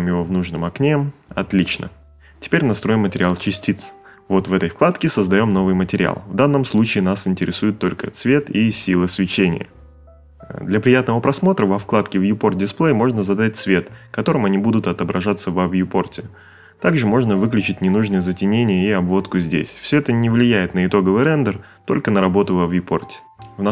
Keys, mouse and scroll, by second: 20.0 click, 20.0 space, 22.0 middle click, 22.4 click.